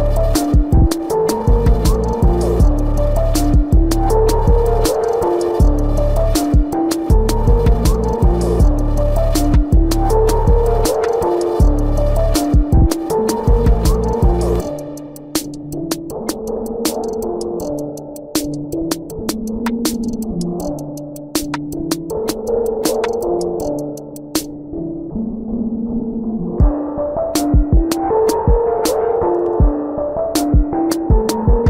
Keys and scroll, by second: 18.4 ctrl+=, 20.2 ctrl+=.